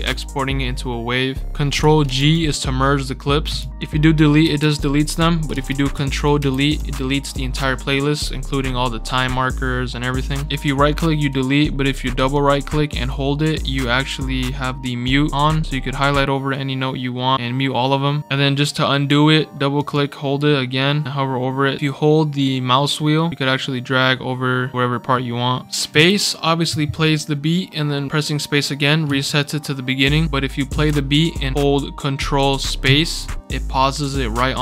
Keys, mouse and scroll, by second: 2.0 ctrl+g, 3.6 ctrl+z, 4.4 Delete, 5.5 ctrl+z, 6.4 ctrl+Delete, 10.6-18.2 right drag, 19.7 right click, 19.9-21.8 right drag, 25.9 space, 29.0 space, 30.6 space, 32.8 ctrl+space, 34.0 scroll up 4.